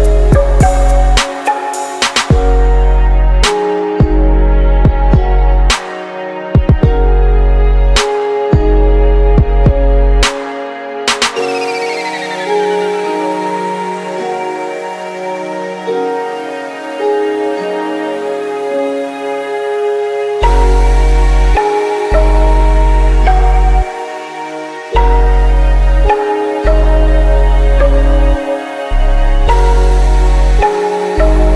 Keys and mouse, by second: 0.4-4.0 middle drag, 4.0-6.0 drag, 6.2-8.0 drag, 8.4-10.3 drag, 13.3-15.1 drag, 17.0-19.6 drag, 20.2-22.2 drag, 22.8-24.7 drag, 25.1 BackSpace.